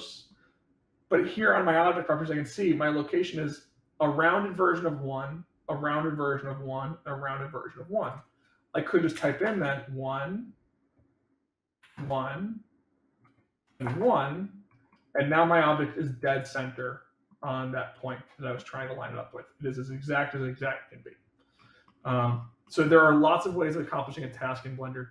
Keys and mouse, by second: 8.0-10.3 drag, 11.1-12.4 drag, 13.0-14.4 drag, 14.9-15.6 middle drag, 16.7-17.2 middle drag, 18.0-18.5 middle drag, 21.7-22.2 middle drag, 22.5 middle click.